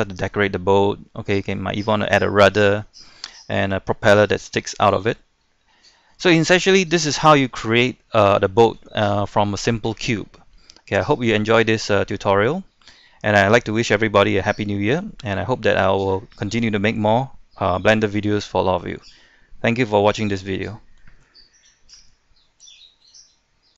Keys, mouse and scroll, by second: 1.3-1.6 scroll up 1, 1.7 shift+middle click, 4.1-5.9 middle drag, 6.1 shift+middle click, 7.7 scroll down 1, 7.9-21.4 scroll up 1.